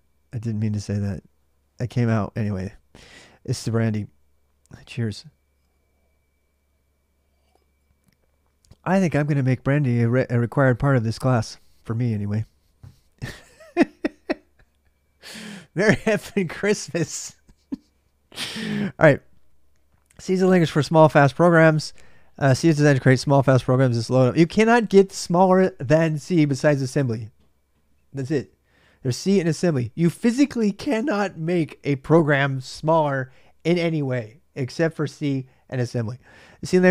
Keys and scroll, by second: 0.0-36.9 typing.